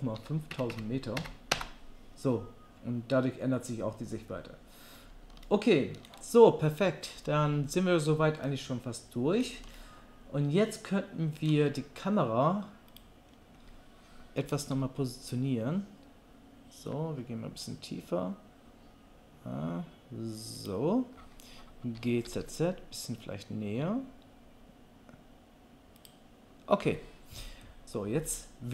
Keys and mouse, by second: 0.7 KP_0, 13.0-28.7 middle drag, 14.4 g, 22.0 g.